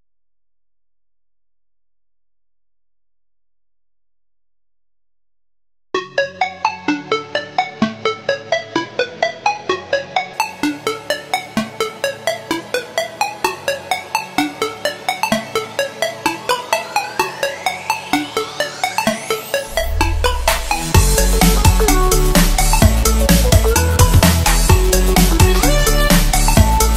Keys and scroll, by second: 6.8 space, 7.3 space, 9.2 space, 9.7 space, 12.1-12.9 space, 14.6-14.9 typing, 15.1 alt+super+space, 15.3 alt+super+space, 15.4 alt+super+space, 15.6-16.0 alt+super+space, 17.2-21.1 typing, 23.6-24.1 typing.